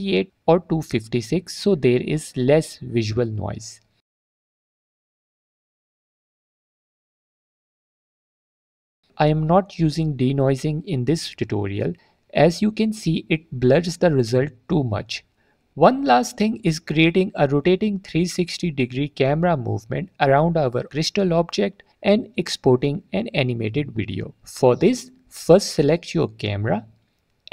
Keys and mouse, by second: 4.2 middle click, 5.0-8.9 drag, 13.0 click, 15.3 click, 17.0 middle drag, 17.1 drag, 19.3 click, 19.9 click, 19.9 middle click, 19.9 right click, 20.4 drag, 22.5-23.1 drag, 23.6 middle drag, 24.7-25.0 middle drag, 26.6 click.